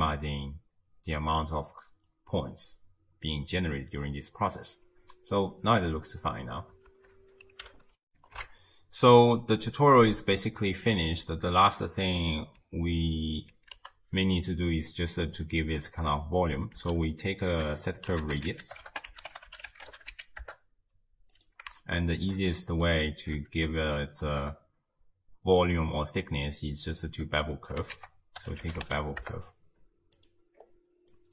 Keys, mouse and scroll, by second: 5.0 space, 6.9 shift+space, 8.1 ctrl+alt+shift+w, 11.1-13.6 middle drag, 13.6 ctrl+a, 21.8 shift+middle click, 22.6 click, 23.4 space, 27.2 space, 28.0 ctrl+a, 30.6-31.2 scroll up 1, 31.2-31.3 middle drag.